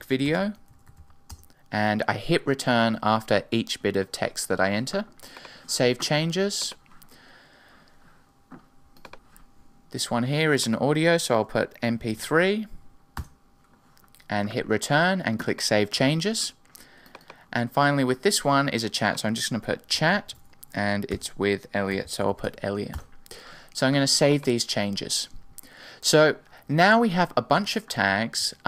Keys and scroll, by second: 13.1 Return, 21.1 Return, 27.9 super+w.